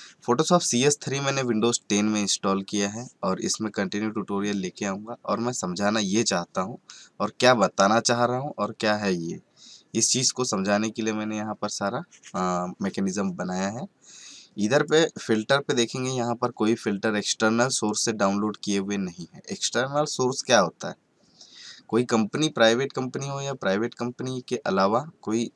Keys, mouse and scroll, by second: 14.7 click.